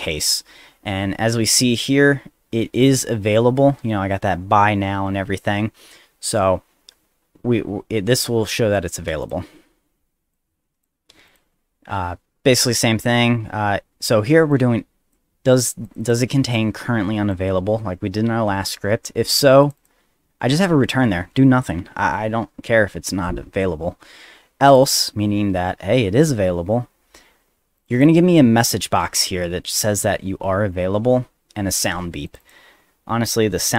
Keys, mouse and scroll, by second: 1.6 middle click, 1.8 scroll down 1, 8.5 click, 9.2 click, 10.3 click, 11.3 click, 11.7 middle click, 11.7 scroll down 1, 14.5 click, 15.8 click, 16.0 click, 16.5 click, 19.6 click, 19.8 click, 24.7 click, 24.8 click, 27.8 click, 27.9 click, 32.3 click, 32.4 click, 33.6 ctrl+c.